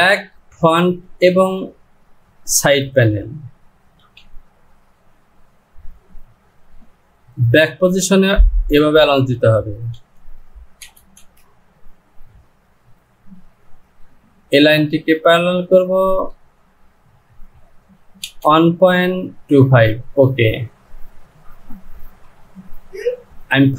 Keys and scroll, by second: 4.1 Home, 10.1 Down, 11.3 Down, 16.1 Down, 22.1 j.